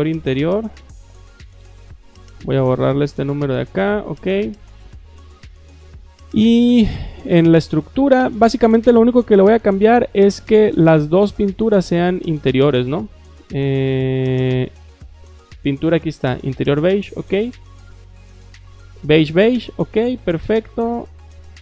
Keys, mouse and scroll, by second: 0.0-1.5 typing, 2.1 click, 3.0 BackSpace, 3.9 click, 7.2 click, 11.0 click, 11.7 click, 15.7 click, 16.6 click, 19.8 click, 21.5 click.